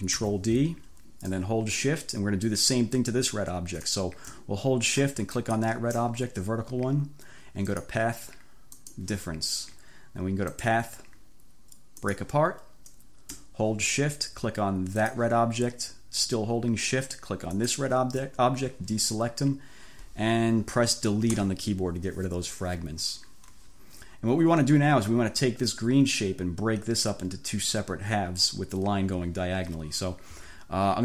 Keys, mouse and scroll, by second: 0.2 ctrl+d, 5.4 shift+click, 7.7 click, 8.8 click, 10.6 click, 12.1 click, 15.0 shift+click, 17.6 shift+click, 21.4 Delete.